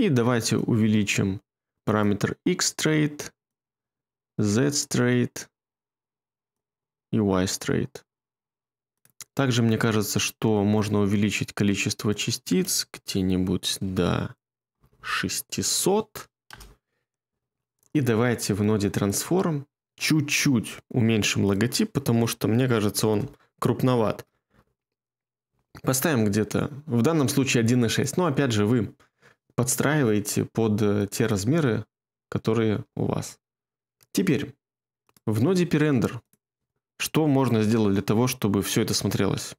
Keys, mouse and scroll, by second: 14.6 BackSpace, 16.4 Return, 22.9 BackSpace, 23.0 BackSpace, 32.6 space.